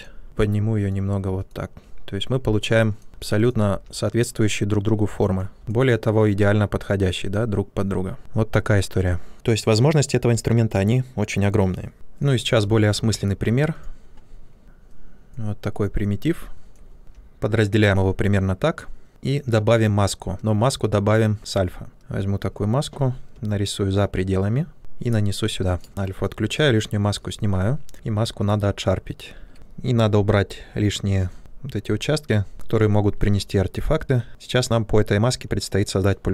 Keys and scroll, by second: 0.2 w, 3.6 q, 17.0 q, 19.0 shift+f, 23.2 ctrl+space.